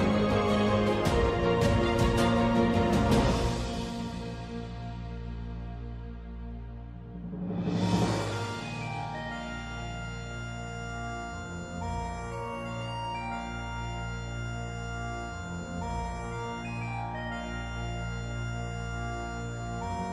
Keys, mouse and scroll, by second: 0.4 ctrl+z, 0.7 ctrl+z, 2.5 2, 2.9 click, 3.0 click, 4.8 click, 5.0 click, 6.0 click, 6.2 click, 7.9 click, 8.7 alt+click, 8.8 alt+click, 10.0 alt+click, 10.1 alt+click, 10.6 click, 10.8 click, 11.6 alt+click, 11.7 alt+click, 13.2 c, 14.0-15.2 drag, 15.2 q, 15.4 click, 16.5-19.4 alt+drag.